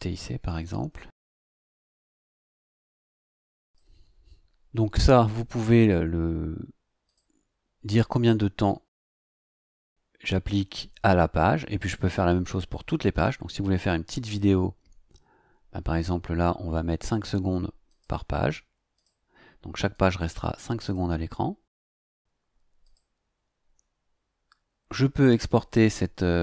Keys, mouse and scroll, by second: 0.6 Caps_Lock, 1.2-2.5 typing, 3.6 click, 7.0 click, 17.8 click, 18.9 click, 19.9 click, 20.8 click, 22.8 click.